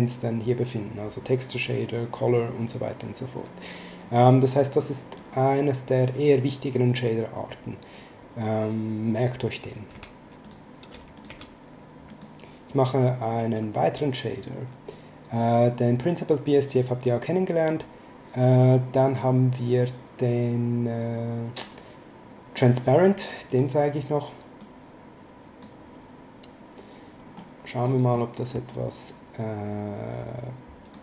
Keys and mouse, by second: 5.2 click, 9.9 x, 10.4 click, 10.8 x, 11.1 click, 11.2 x, 12.1 click, 22.5 click, 24.6 click, 28.1 middle click, 30.8 click.